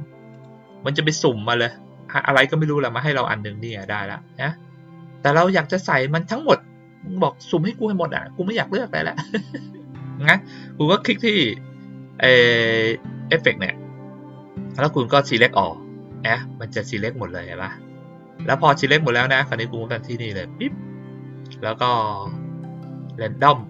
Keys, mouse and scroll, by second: 0.3 click, 10.2 click, 10.9 click, 15.2 click, 20.0 click.